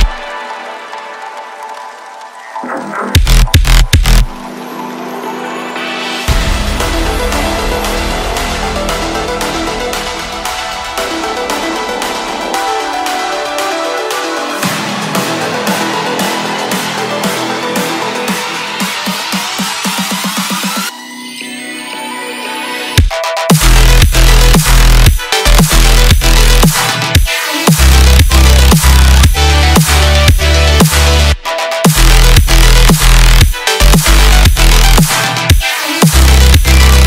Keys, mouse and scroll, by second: 2.3-2.7 scroll up 9, 3.0-3.3 scroll down 1, 3.4 middle click, 4.1-5.2 s, 5.5-8.5 middle drag, 9.2 click, 11.7-12.8 drag, 12.8-14.1 scroll down 16, 14.6 scroll up 1, 16.5-17.5 middle drag, 17.5-18.8 scroll down 4, 18.8-21.4 drag, 22.8-25.9 drag, 26.0-29.8 drag, 30.2 space, 31.8 space, 33.0-37.0 drag.